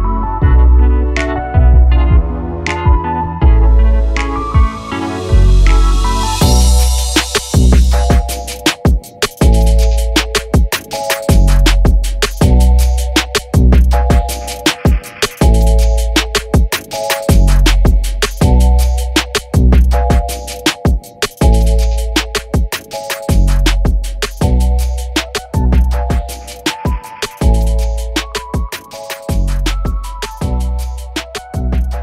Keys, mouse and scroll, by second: 1.1 g, 1.8 r, 2.3 r, 3.1 g, 4.6 click, 4.9 alt+d, 5.5 r, 6.5 g, 6.9 g, 8.3 g, 9.0 alt+a, 9.3 click, 9.6 t, 9.6 t, 9.9 r, 11.3 g, 11.8 alt+a, 11.9 click, 12.2 g, 12.8 r, 14.6 g, 15.5 g, 16.1 r, 17.5 g, 18.2 r, 18.8 click, 19.3 r, 20.7 click, 21.0-21.3 scroll down 1, 21.3-24.0 typing, 22.7 click, 24.0 alt+a, 24.1 scroll up 1, 24.3-25.4 shift+middle drag, 25.4 z, 27.9 click, 28.2 scroll down 2, 28.4 scroll up 1, 28.9 s, 29.1 s, 29.8 s, 30.8 scroll down 2, 31.1 scroll up 3, 31.3 scroll down 5, 31.6 shift+middle click, 31.7-32.0 scroll up 1.